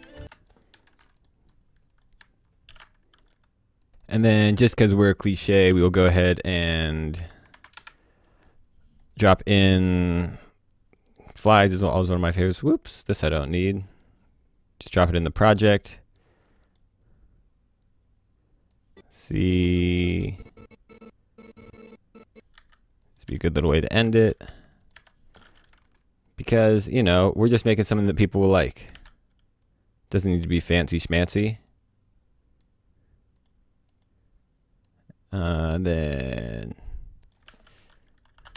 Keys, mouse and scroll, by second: 0.0 v, 0.1 space, 0.4 click, 1.0 Delete, 1.1 click, 2.6 ctrl+shift+d, 3.1 click, 4.0 click, 5.6 e, 6.9-8.0 typing, 8.9-11.0 scroll down 1, 11.0 click, 11.3 KP_Enter, 11.8 KP_Enter, 13.9 click, 18.7 click, 22.5 c, 23.0 click, 23.2 v, 23.9 ctrl+z, 24.4 c, 24.8 click, 24.9 v, 25.0 click, 25.8 Delete, 26.2 click, 28.9 ctrl+d, 29.6-35.4 drag, 37.4-38.5 typing.